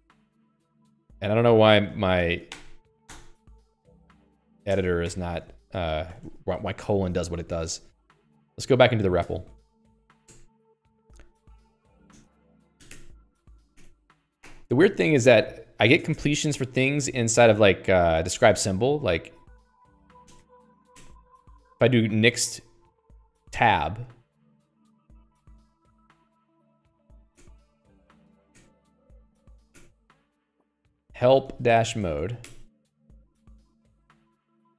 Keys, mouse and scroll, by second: 0.0-5.1 typing, 2.0 Escape, 3.6 ctrl+alt+i, 3.9 Escape, 5.5 ctrl+alt+i, 5.8 Escape, 6.3 d, 6.6 d, 7.0 ctrl+s, 7.2 Escape, 8.0 click, 8.1 Escape, 8.2 Escape, 8.8 ctrl+alt+j, 9.0-14.0 typing, 10.7 Return, 12.8 Tab, 13.3 Tab, 14.2 Tab, 14.3 Tab, 14.8 ctrl+alt+i, 15.4 Escape, 16.2 a, 16.4 BackSpace, 16.6 BackSpace, 16.7 Escape, 17.4 alt+click, 18.3 ctrl+j, 18.7 Return, 19.8-21.2 typing, 21.4 Tab, 25.2 space, 26.7-28.1 typing, 28.4 Delete, 28.5 Delete, 28.9 Tab, 30.0 h, 30.1 Tab, 31.3-32.8 typing, 32.9 Tab.